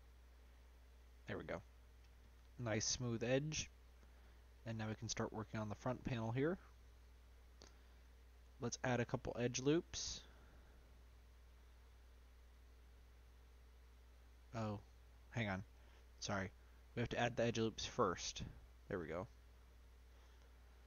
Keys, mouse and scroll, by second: 0.6-1.6 drag, 2.4 scroll down 2, 2.8 middle click, 3.7-4.4 scroll down 1, 4.4-7.0 middle drag, 7.0 click, 7.6-8.8 scroll up 2, 8.8-11.1 drag, 11.1 middle click, 11.5-12.6 scroll down 2, 14.3-15.4 middle drag, 15.4 ctrl+z, 15.7 ctrl+z, 16.1-17.1 middle drag, 17.1-20.8 drag.